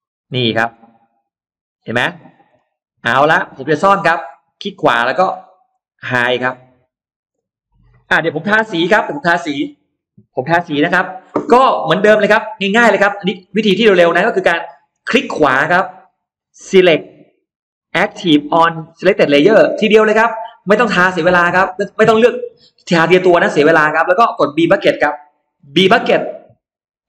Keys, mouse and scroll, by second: 0.1-0.5 scroll down 1, 0.5-0.9 scroll up 1, 0.6-1.7 middle drag, 1.8-2.5 scroll down 2, 2.1 middle click, 2.8-3.6 scroll up 2, 3.3 middle click, 4.3 right click, 5.5 click, 6.1 middle click, 6.7-7.0 scroll down 1, 8.3-8.6 scroll up 1, 8.5 middle click, 8.8 scroll down 1, 11.0 scroll up 1, 11.1 middle click, 12.1 space, 12.3-13.1 scroll up 2, 12.9 middle click, 13.6-14.3 scroll up 2, 14.2 middle click, 14.7-15.1 scroll down 2, 15.3 right click, 19.5 click, 25.5 b.